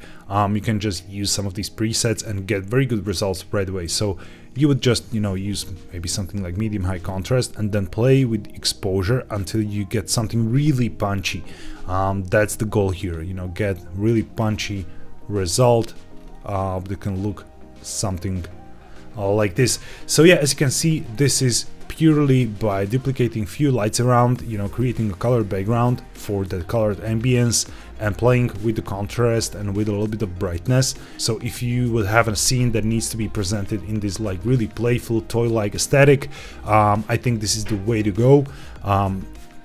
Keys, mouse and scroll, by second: 0.4-5.6 drag, 6.7-14.3 drag, 14.6-15.7 scroll down 2, 16.1-18.0 scroll up 2, 18.0-19.4 scroll up 1, 22.1-23.1 scroll down 1, 27.1-27.7 scroll up 2, 30.4-30.8 scroll up 1.